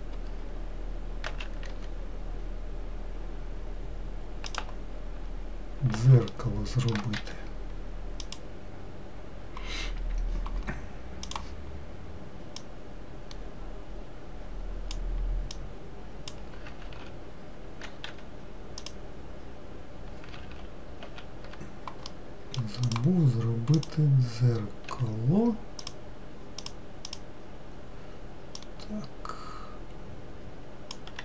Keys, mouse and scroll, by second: 1.9 s, 5.7-6.8 scroll up 1, 6.8 shift+middle click, 7.7 1, 8.9 click, 11.9-13.5 drag, 16.2 click, 17.4 ctrl+z, 18.6 3, 19.4 click, 21.0 ctrl+z, 21.6 ctrl+z, 22.6 middle click, 23.5 click, 24.4 click, 25.4 3, 26.4 click, 27.2 click, 29.3 click.